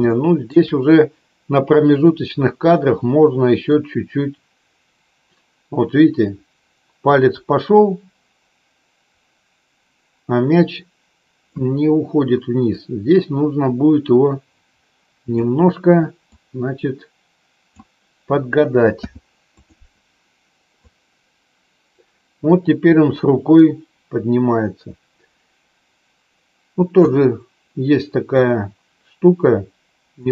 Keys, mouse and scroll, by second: 0.1 shift+middle click, 2.0 click, 3.9-11.8 drag, 12.7-15.4 drag, 16.3-17.8 drag, 20.9-27.3 drag, 28.6-30.3 drag.